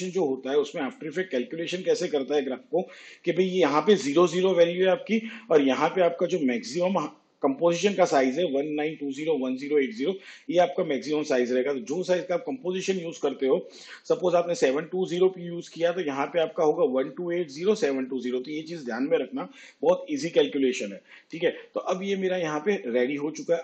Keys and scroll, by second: 22.3 v.